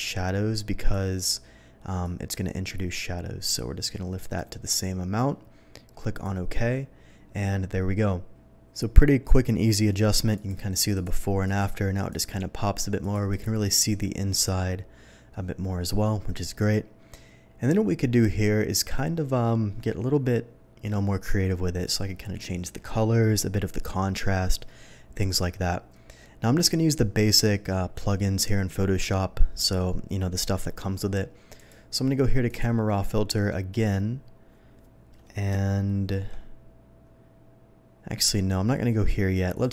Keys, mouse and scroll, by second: 0.0 click, 2.0-4.3 drag, 6.1 click, 9.7 click, 10.3 click, 10.9 click, 11.4 click, 11.9 click, 13.0 click, 13.3 click, 28.4 typing, 31.6 click, 32.5 click, 36.0 alt+middle click, 39.5 click.